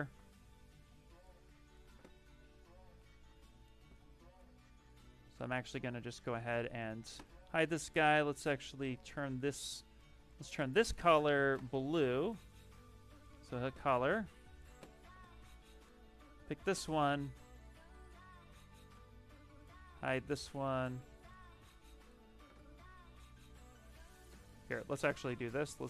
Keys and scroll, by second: 0.0 x, 2.4 shift+f, 23.3 ctrl+z.